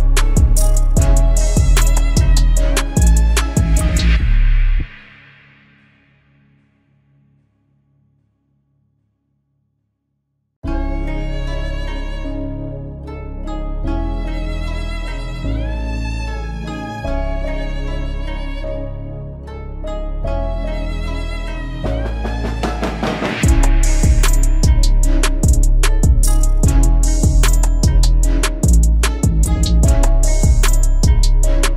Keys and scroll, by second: 3.2 ctrl+i, 21.3 ctrl+alt+z, 21.7 ctrl+alt+z.